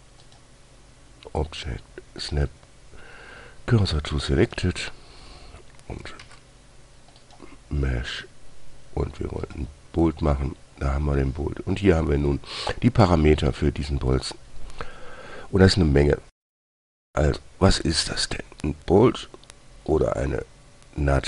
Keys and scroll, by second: 6.6 shift+a.